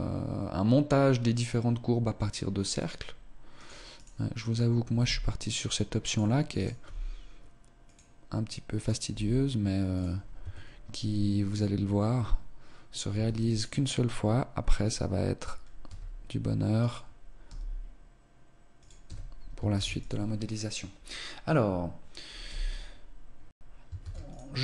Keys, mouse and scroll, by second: 2.7 right click, 3.5 right click, 4.9 g, 5.4 click, 6.5 right click, 6.8 g, 8.8 right click, 9.0 g, 10.3 Tab, 11.4-12.1 scroll down 1, 13.1 Tab, 13.5 right click, 15.8 s, 17.4 g, 19.0 Tab, 19.7 ctrl+s, 22.5 z, 23.3-23.6 scroll down 2, 23.9 ctrl+s.